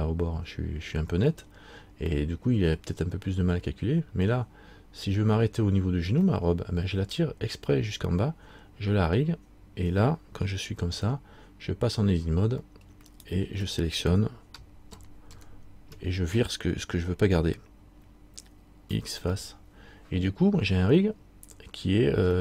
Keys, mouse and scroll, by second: 2.3 middle click, 6.5 middle click, 10.9 Tab, 13.2 alt+right click, 15.1 ctrl+KP_Add.